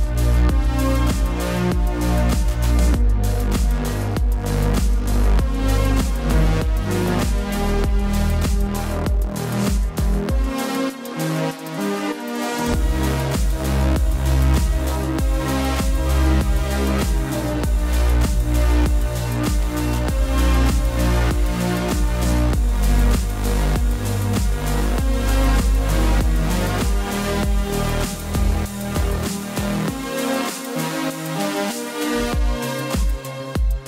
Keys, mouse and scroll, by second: 5.9 ctrl+=, 6.1 space, 6.2 click, 6.3 space, 6.6 ctrl+=, 6.9 ctrl+s, 7.7 s, 13.1 click, 15.6 click, 16.7 click, 21.9 right click, 23.0 click, 25.5 click, 29.0 click, 31.8-33.8 typing, 32.0 click, 32.7 ctrl+=, 33.1 click.